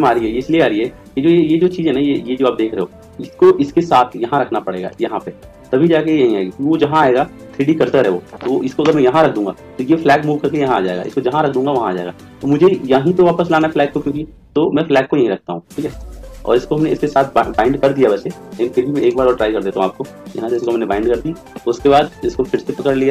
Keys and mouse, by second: 4.8 click, 8.7 click, 10.9 click, 13.4 click, 18.9 click, 22.4-23.1 right drag.